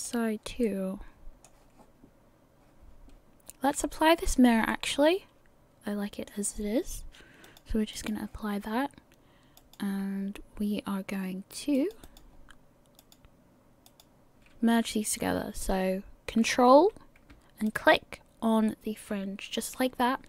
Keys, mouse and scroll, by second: 0.6 middle click, 4.7 middle click, 7.4 click, 9.6 click, 13.9 click, 17.7 ctrl+click.